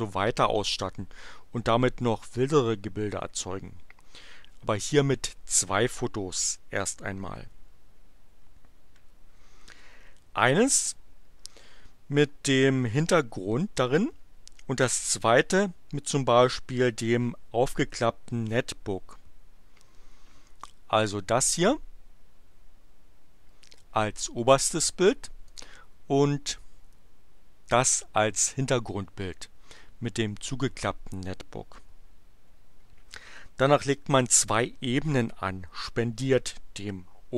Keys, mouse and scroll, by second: 21.2 click, 25.5 click.